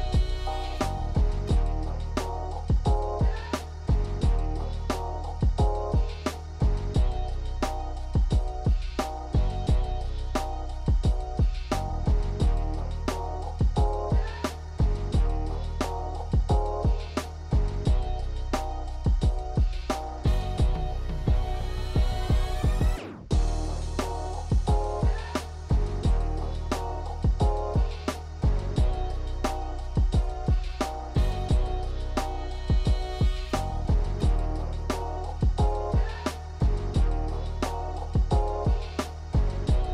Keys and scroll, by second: 2.1 ctrl+z, 20.5 1.